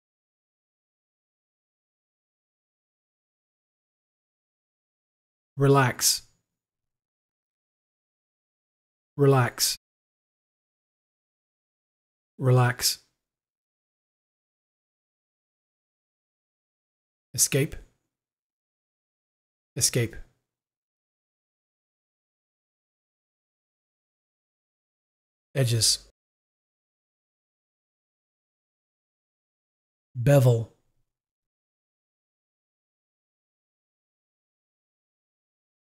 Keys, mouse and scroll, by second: 1.9 click, 3.5 click, 4.1 click, 7.0 u, 10.4 u, 12.0 u, 12.2 click, 13.7 click, 18.4 Escape, 20.6 Escape, 26.6 Escape, 28.2 click, 31.2 click, 31.3 u, 33.1 u, 33.4 click, 34.2 click.